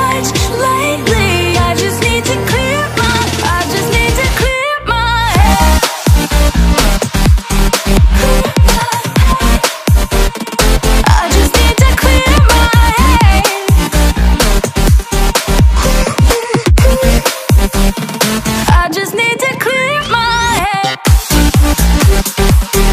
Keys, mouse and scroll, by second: 1.3 click, 4.6 click, 6.8 click, 10.6 click, 14.3-15.5 drag, 15.5 double click, 19.7 click.